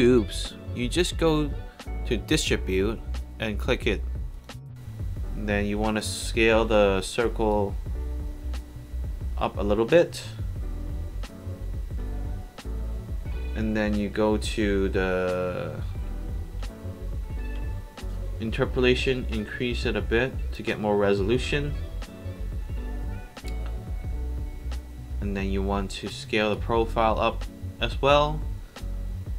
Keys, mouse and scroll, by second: 0.6 click, 2.2 click, 3.0 alt+middle drag, 6.2 click, 6.7 r, 7.5-9.6 drag, 13.2 middle click, 13.2 scroll down 2, 19.4 click, 23.0-25.1 scroll up 2, 26.5-28.6 drag.